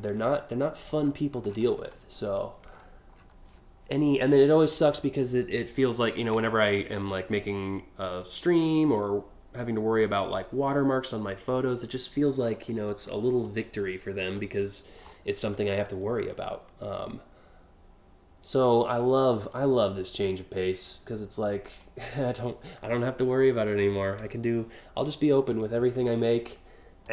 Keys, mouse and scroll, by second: 0.5 scroll up 1, 1.0-1.5 scroll down 3, 1.8 click, 2.3 scroll up 1, 2.8 scroll down 4, 4.4 click, 6.0 scroll up 1, 6.6 alt+scroll up 1, 7.8-9.6 drag, 10.9-12.5 drag, 13.0 click, 14.6-15.1 scroll down 2, 16.5-18.2 drag, 19.1-21.4 drag, 23.9 click, 25.0 click, 25.7 ctrl+click, 26.6-27.1 drag.